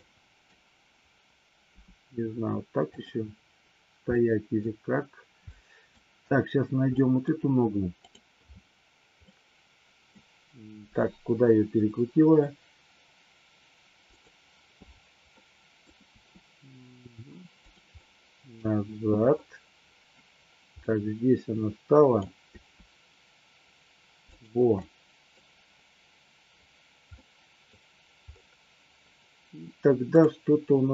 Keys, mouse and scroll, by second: 0.1-0.5 middle drag, 1.8 g, 2.9 click, 4.1-4.5 middle drag, 5.4 middle click, 6.9 scroll up 1, 7.0 middle click, 7.9-8.8 drag, 9.1-10.1 middle drag, 10.8 r, 14.1 click, 15.4-15.8 middle drag, 15.8 scroll down 1, 16.0 r, 17.6 click, 17.9-18.6 middle drag, 20.9-22.3 middle drag, 22.5 r, 24.8 middle click, 27.1-27.6 middle drag, 30.3-30.9 drag.